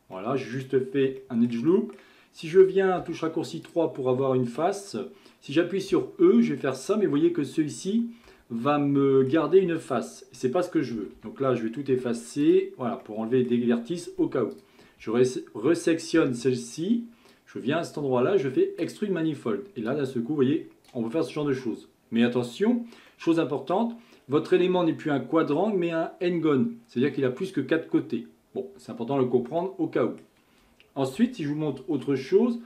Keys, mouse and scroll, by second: 0.2-3.0 middle drag, 3.0 3, 3.7 click, 5.9 e, 8.8-11.0 middle drag, 11.0 a, 11.2 a, 11.9 m, 13.1-14.5 middle drag, 14.5 click, 17.3-20.0 drag, 21.2-22.6 middle drag, 22.6-23.1 scroll up 2, 23.1-26.2 middle drag, 29.6-31.2 middle drag, 31.2 KP_1, 31.9-32.3 scroll down 1, 32.3-32.6 shift+middle drag.